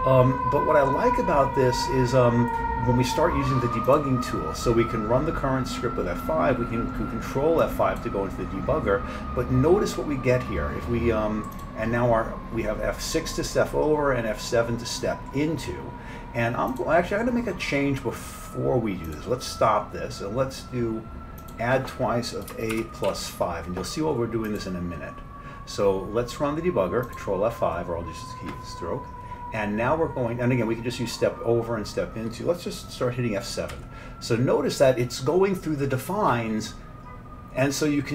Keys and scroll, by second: 33.7 F7.